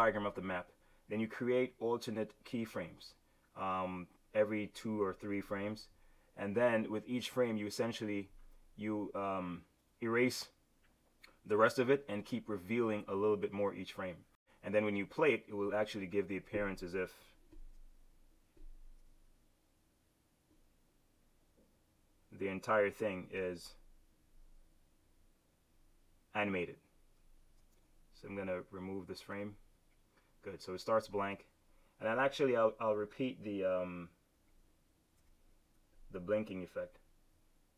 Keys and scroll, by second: 17.5 shift+F6, 19.0 super+z, 23.5 F7, 35.0 F5.